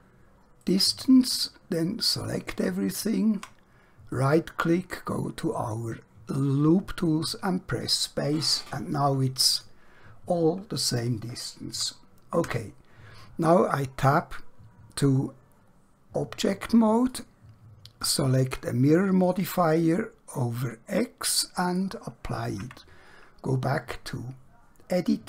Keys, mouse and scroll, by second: 0.7 ctrl+right click, 4.2 right click, 6.9 click, 9.6 click, 12.5 Tab, 17.1 click, 22.7 Tab, 24.6 scroll up 1.